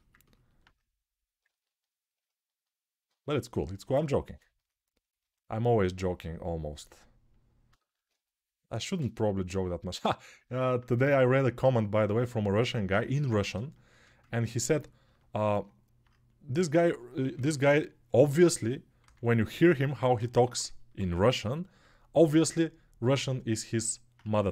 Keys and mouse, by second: 13.3 alt+shift+right click, 13.7-24.5 ctrl+alt+drag, 16.3 1, 17.0 [, 17.2 [, 17.3 [, 18.8 2, 24.0 1.